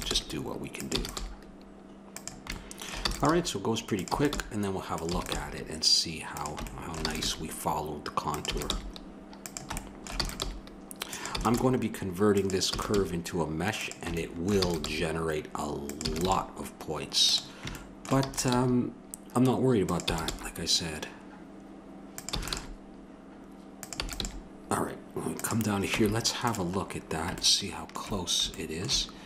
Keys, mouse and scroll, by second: 0.2 g, 0.9 e, 1.2 g, 3.1-5.3 typing, 6.7-8.5 middle drag, 7.0 e, 7.2 g, 8.5 e, 8.7 g, 9.8 middle click, 10.3 e, 10.4 g, 11.3 e, 11.5 g, 12.7 e, 12.9 g, 14.9 g, 16.0 e, 16.2 g, 18.2 e, 18.5 g, 20.1 e, 20.3 g, 22.3 e, 22.5 g, 24.0 e, 24.2 g, 26.0 Tab.